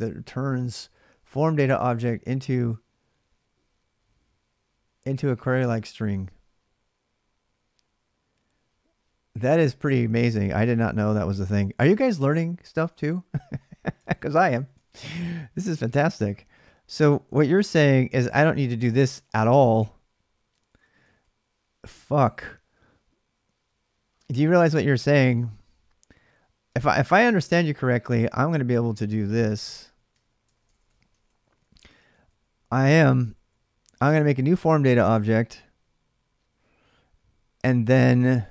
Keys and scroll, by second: 10.4 ctrl+[, 10.4 ctrl+j, 13.6-18.5 typing, 20.3 k, 20.4 k, 25.3-33.9 typing, 29.9 ctrl+[.